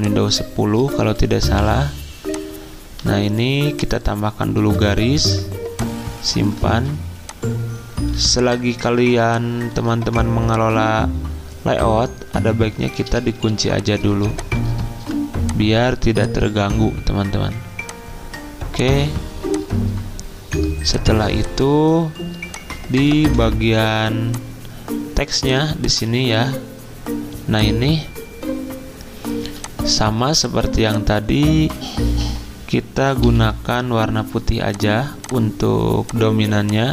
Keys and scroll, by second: 1.0 ctrl+z, 4.6-5.2 typing, 6.7 ctrl+z, 8.1-10.0 typing, 12.3-15.0 typing, 21.1 z, 22.9 v, 29.4 z, 32.2 g, 33.2 d.